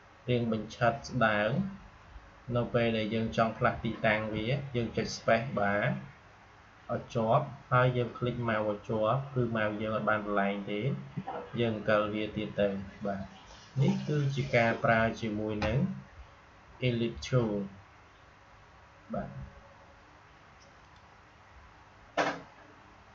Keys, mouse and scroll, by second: 4.2 space, 7.1 space, 7.7 space, 20.7 click.